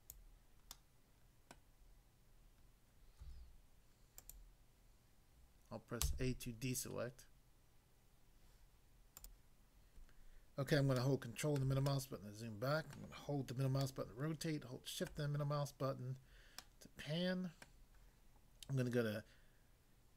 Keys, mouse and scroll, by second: 0.1 click, 0.7 middle click, 1.6 middle click, 3.2 s, 4.2 click, 6.0 a, 9.2 click, 11.0 ctrl+middle click, 13.8 shift+middle click, 15.1 shift+middle click, 16.6 middle click, 17.7 middle click.